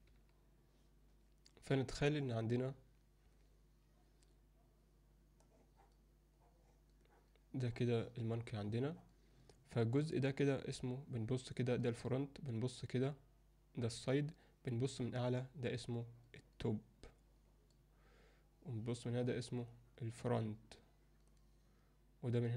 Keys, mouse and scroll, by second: 0.0 ctrl+F10, 5.4 click, 6.4 click, 7.0 click, 7.7 click, 8.7 click, 9.0 click, 9.4 click, 11.0 click, 12.6 click, 13.1 click, 14.7 click, 15.4 click, 16.1 click, 16.4 click, 16.8 click, 17.2 click, 19.1 click, 19.5 click, 21.0 click.